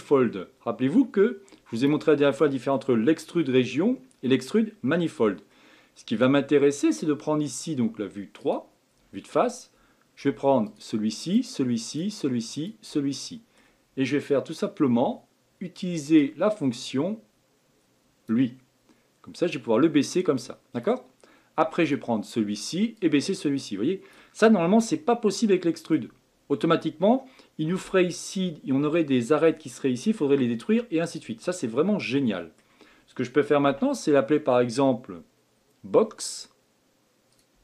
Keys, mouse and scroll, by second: 5.5-8.4 middle drag, 8.4 click, 10.6 shift+click, 11.2 shift+click, 11.8 shift+click, 12.5 shift+click, 13.1-16.1 middle drag, 16.1-19.3 drag, 19.3 click, 21.8 click, 23.0 click, 24.5-27.5 middle drag, 31.6-33.7 middle drag, 33.7 Tab, 36.3-37.6 drag.